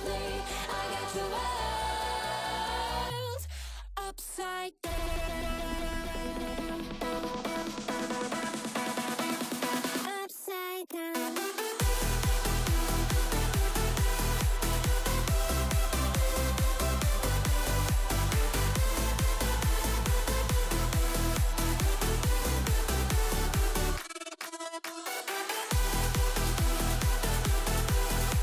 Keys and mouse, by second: 0.2 click, 1.0 click, 1.7-2.7 drag, 3.2 click, 3.6 g, 5.7 ctrl+b, 10.7 Tab, 11.3 shift+d, 11.9 Tab, 13.5 k, 16.2 k, 18.5 k, 21.4 2, 22.2 click, 22.9 shift+middle click, 24.5 c, 26.0 v, 26.8 Tab, 27.1-27.4 middle drag, 27.6 Tab, 27.9 a, 28.1 click.